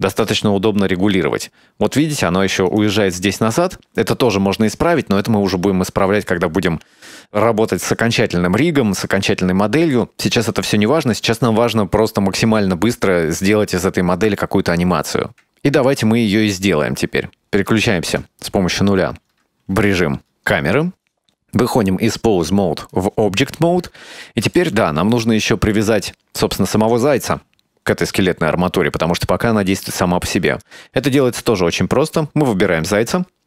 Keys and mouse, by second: 18.2 KP_0, 20.3 Tab, 21.9-23.0 drag, 24.4 shift+middle drag, 25.3-25.9 middle drag, 26.7 shift+middle drag, 27.0-27.9 middle drag, 30.6 right click.